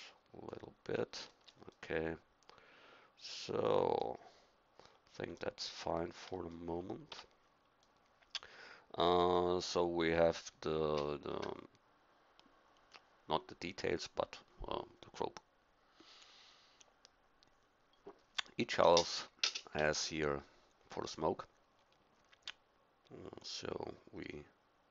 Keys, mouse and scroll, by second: 1.5-2.7 middle drag, 7.1 Tab.